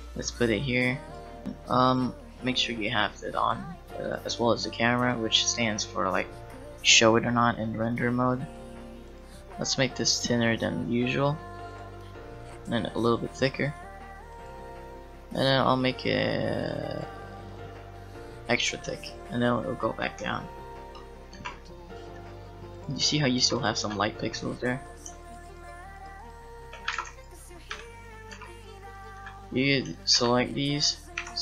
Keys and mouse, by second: 1.1 middle click, 4.0-9.1 drag, 9.1-10.2 right drag, 13.7 click, 14.3-17.5 middle drag, 19.1 click, 19.3-20.8 middle drag, 20.8 click, 21.3 g, 23.4 g, 23.8 Tab, 26.9 ctrl+z, 27.8 Tab, 28.4 g, 29.2 Tab, 30.2 g, 31.2 p.